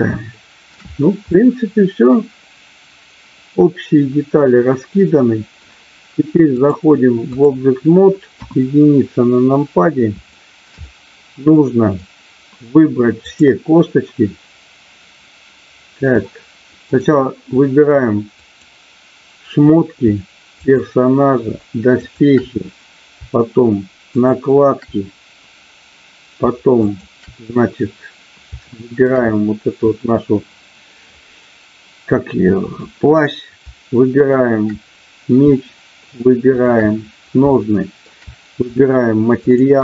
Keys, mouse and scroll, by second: 0.2 shift+middle click, 1.2-5.6 middle drag, 6.5-7.5 drag, 8.4 KP_1, 10.4 middle click, 10.9-12.0 middle drag, 13.2 click, 16.1 middle click, 16.9 middle click, 18.2 click, 20.6 shift+click, 22.1 shift+click, 24.1 shift+click, 26.9 shift+click, 28.6 shift+middle click, 29.2 middle click, 34.1 shift+click, 36.5 shift+click, 37.5 shift+middle click, 39.5 shift+click.